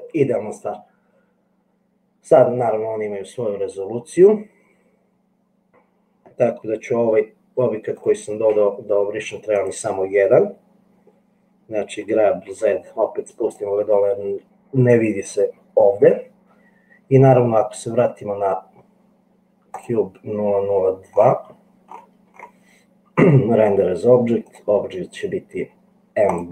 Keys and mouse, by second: 8.7 Delete, 8.7 click, 12.2 g, 24.5-26.5 drag.